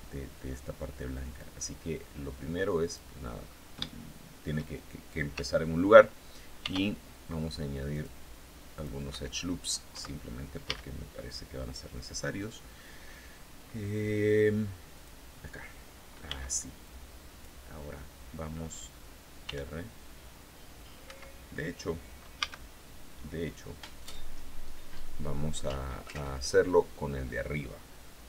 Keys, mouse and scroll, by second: 0.8-2.6 drag, 2.9-3.2 scroll up 2, 3.3 shift+click, 6.1 ctrl+r, 6.7-7.0 scroll up 2, 7.4 click, 8.2 click, 8.6 Escape, 10.1 a, 14.4 click, 15.7 b, 16.3 click, 18.9 r, 20.5 Escape, 21.8 a.